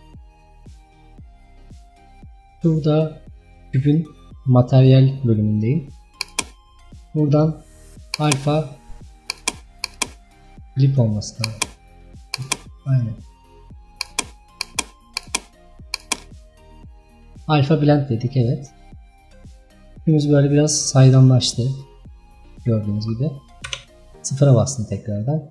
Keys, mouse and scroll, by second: 17.7 scroll up 1, 19.3 scroll up 2, 19.8 scroll down 2, 21.5-23.2 middle drag, 23.2 KP_0.